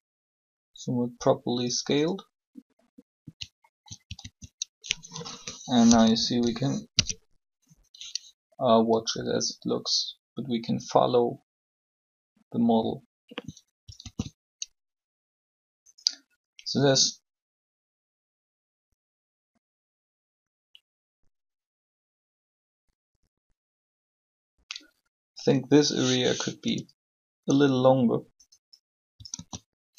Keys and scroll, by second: 3.9 alt+shift+a, 5.8 3, 6.6 0, 14.0 alt+a, 26.6 s, 29.3 alt+a.